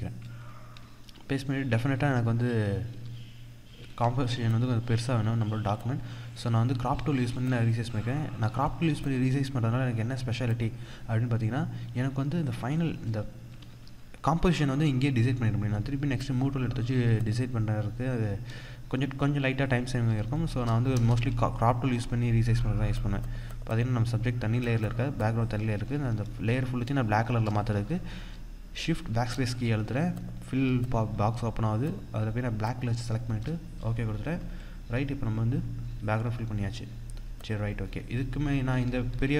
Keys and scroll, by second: 0.8 ctrl+-, 1.5 ctrl+=, 2.3 ctrl+=, 2.6 ctrl+0, 3.5 ctrl+-, 5.1 ctrl+-, 13.3 ctrl+-, 20.7 Return, 28.9 shift+BackSpace, 35.7 ctrl+=.